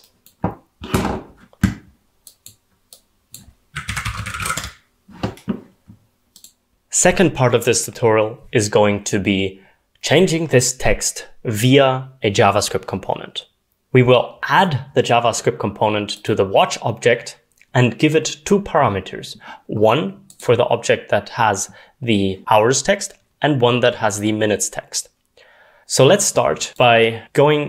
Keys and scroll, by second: 3.6-4.9 typing.